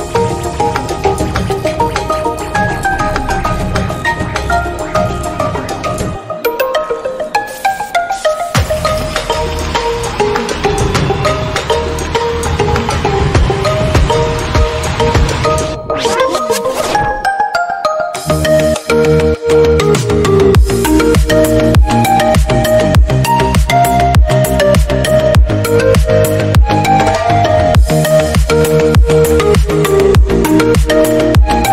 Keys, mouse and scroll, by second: 0.2 g, 0.6 middle drag, 0.8 scroll up 1, 1.0 g, 1.4-2.1 middle drag, 2.1-2.9 scroll down 1, 2.9-3.3 scroll up 2, 3.3 shift+middle click, 4.1 shift+d, 4.7-5.1 middle drag, 5.1 g, 6.1-6.9 middle drag, 6.9 scroll down 1, 7.0 middle drag, 7.1 click, 7.5-8.5 middle drag, 8.5-9.0 scroll up 2, 8.6 shift+middle drag, 9.0 click, 9.1 middle click, 9.5 shift+d, 10.0 middle click, 10.8 click, 11.3 scroll down 2, 11.5-12.2 middle drag, 12.2 scroll up 1, 12.3 click, 12.5-13.1 middle drag, 13.1 shift+d, 13.8 middle click, 14.2-14.7 drag, 14.7 shift+d, 15.6-16.2 drag, 16.2 shift+d, 16.8-17.5 middle drag, 17.5 g, 18.1-18.6 middle drag, 18.6 scroll up 1, 18.7 click, 18.8 g, 19.3 middle click, 19.6-19.9 scroll down 3, 19.6 middle click, 19.9 drag, 20.1 scroll up 1, 20.5 shift+d, 20.9 scroll up 1, 21.1 middle click, 21.3 scroll down 1, 21.5 middle drag, 21.8-23.0 scroll up 2, 21.9-22.3 middle drag, 23.0 shift+d, 23.6 scroll up 1, 23.8-24.7 shift+middle drag, 24.7 g, 25.2-26.5 middle drag, 26.5 click, 27.5 click, 27.6 scroll down 3, 27.7-28.4 middle drag, 28.4-28.9 scroll up 2, 28.6 drag, 28.9-29.6 middle drag, 29.6 shift+d, 30.3 scroll down 4, 30.4 click, 30.6 scroll up 3, 30.9 click, 31.1 middle click, 31.3-31.7 scroll up 1.